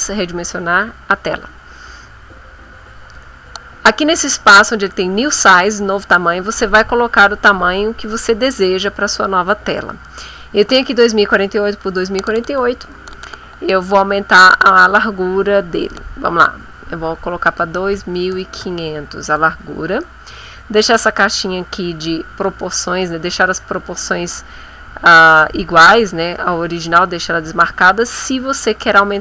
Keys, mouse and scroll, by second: 0.6 click, 7.7 click, 14.5 click, 17.6 KP_2, 17.9 KP_5, 18.3 KP_0.